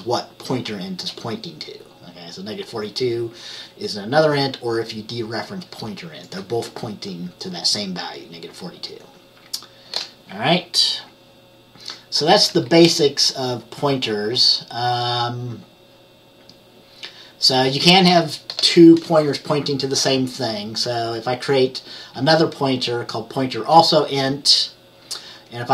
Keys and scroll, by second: 12.6 F10.